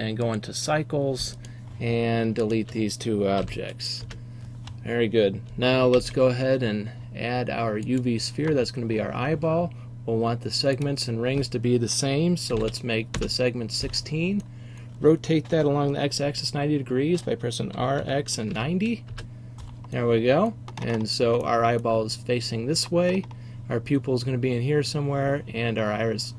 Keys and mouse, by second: 3.5 Delete, 6.0 shift+a, 10.8-13.2 drag, 13.2-14.5 right drag, 14.5-17.9 middle drag, 17.9 r.